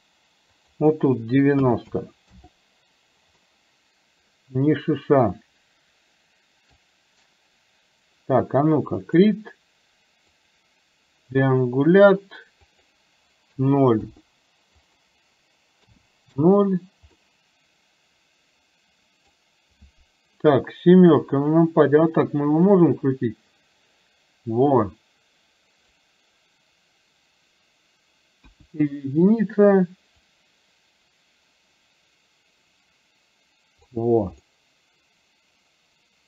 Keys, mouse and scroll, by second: 0.6-2.5 drag, 3.5-9.1 middle drag, 9.1 click, 10.4 click, 12.6-14.1 drag, 14.9-16.5 drag, 17.3-19.4 middle drag, 21.2 KP_7, 22.7-26.1 drag, 28.5 KP_1, 30.5-34.0 drag, 34.5-36.2 middle drag.